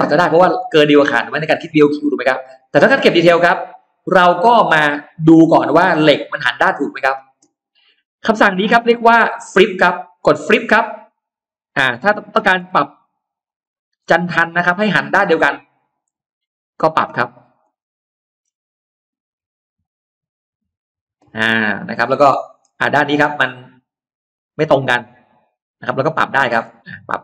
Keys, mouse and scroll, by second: 2.2-2.5 scroll down 2, 2.6-2.9 scroll up 2, 3.2-3.6 scroll down 2, 3.6-3.9 scroll up 1, 3.6-4.9 middle drag, 5.0 scroll down 2, 5.6-6.9 middle drag, 6.0 scroll down 1, 10.0 click, 11.5 click, 12.0 middle click, 12.7 scroll up 2, 13.2 click, 13.5 middle click, 13.8-14.4 scroll down 1, 14.5-15.8 middle drag, 15.8-16.2 scroll down 1, 16.3-16.6 scroll up 1, 16.8 click, 17.2-17.5 scroll down 1, 17.6 middle click, 19.1-19.4 scroll up 1, 19.6 click, 20.5 click, 21.1-21.8 scroll down 2, 21.4 middle click, 22.8-23.1 scroll up 1, 23.6-26.4 middle drag, 26.4 scroll down 2, 26.8 scroll up 2.